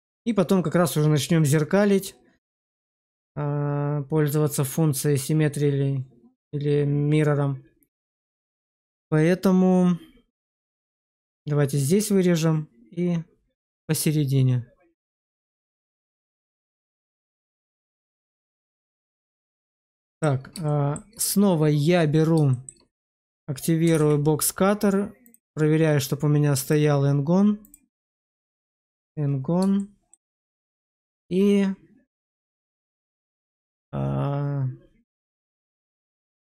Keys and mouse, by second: 17.2 alt+middle click, 18.1 shift+middle click, 20.0 shift+middle click, 20.6 shift+middle click, 22.4 shift+middle click, 23.8 alt+w, 25.2-26.6 drag, 27.6-29.0 drag, 29.7-30.0 shift+middle drag.